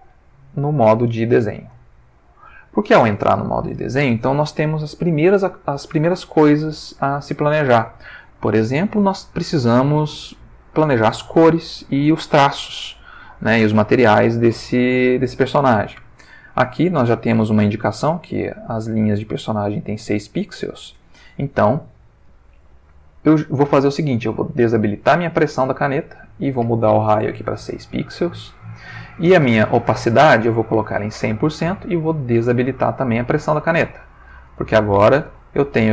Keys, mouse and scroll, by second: 1.2 click, 25.0 click, 26.2 click, 27.3 6, 27.6 Return, 30.5-31.7 drag, 32.3 click, 33.7 click, 35.2 click.